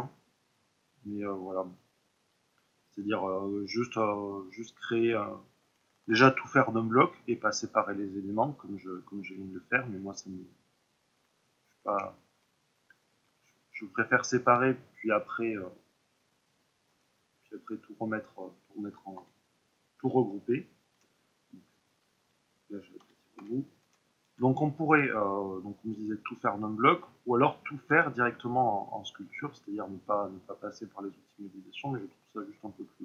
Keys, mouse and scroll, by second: 1.1-2.1 middle drag, 2.1 click, 4.7-6.1 middle drag, 6.1 ctrl+r, 7.2 click, 9.9 middle click, 13.2 e, 14.5 right click, 15.2-24.8 drag, 16.8 KP_1, 19.1 s, 21.9 Escape, 22.9 s, 24.3 Return, 24.8-28.8 middle drag, 27.8 s, 28.9-32.2 middle drag, 28.9 click, 32.2 ctrl+r.